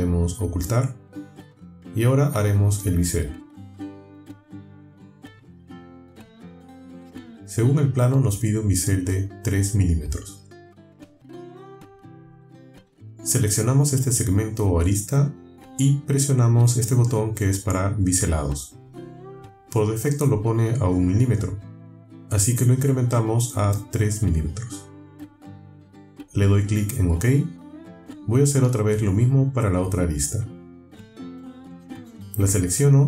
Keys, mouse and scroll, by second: 0.4 click, 1.0 space, 2.0-3.0 drag, 3.2-3.6 scroll up 1, 4.0-4.4 shift+drag, 5.7 click, 6.2 click, 8.8 click, 11.5 click, 13.8 click, 15.5-16.1 alt+scroll up 4, 16.8 alt+scroll up 1, 17.2-18.0 alt+scroll down 2, 18.9 click, 23.4 click, 24.0 click, 26.3 click, 27.6-28.7 drag, 29.2 shift+click, 30.4-31.4 shift+drag, 31.6-32.2 shift+drag.